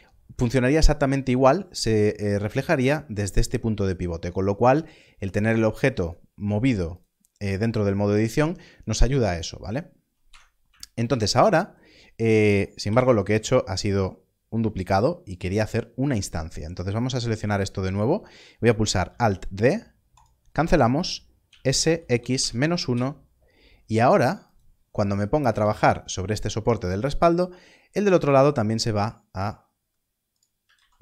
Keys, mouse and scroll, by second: 5.5 click, 10.2 click, 10.3 Tab, 12.8 7, 13.3 Tab, 13.9 click, 15.3 x, 16.1 click, 19.0 alt+d, 20.1 right click, 21.4 s, 22.1 -, 22.3 1, 22.9 Return, 24.5 click, 25.5 Tab, 27.2 click, 28.4 e, 30.3 right click.